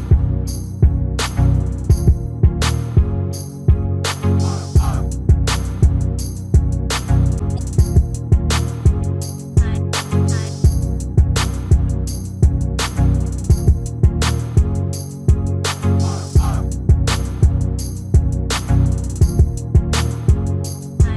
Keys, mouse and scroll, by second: 1.0 s, 5.3 middle click, 6.1 right click, 7.1 a, 7.3 s, 13.2 middle click, 13.9 r, 15.7 h, 16.3 ctrl+z, 16.7 g.